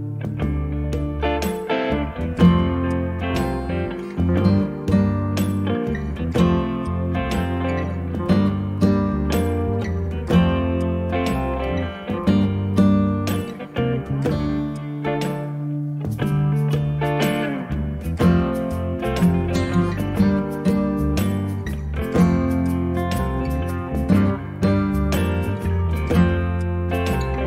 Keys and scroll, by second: 5.0 space, 9.4 m, 11.4 0, 11.8 Return, 12.3 space, 16.4 p, 19.0 space, 21.2 p, 22.2 space.